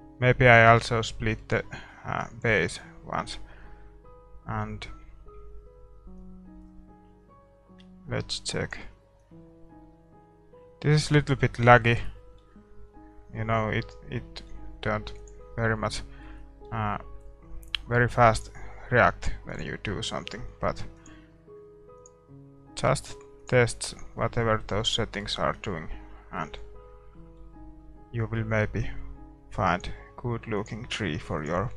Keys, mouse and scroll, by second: 0.1-1.6 drag, 0.9 right click, 2.1-6.6 middle drag, 6.6-11.1 drag, 11.9-16.6 middle drag, 15.6-16.6 drag, 24.9-27.3 drag, 24.9-26.9 middle drag, 27.3-30.1 middle drag, 30.1-31.7 drag.